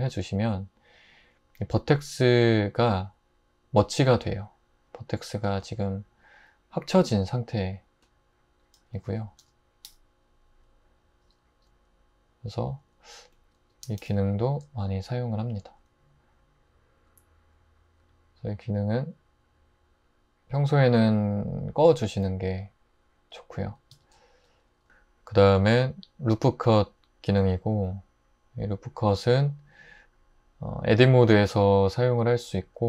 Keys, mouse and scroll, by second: 5.5 typing, 8.8-9.9 typing, 13.8 typing, 23.9 Tab, 29.8 Tab.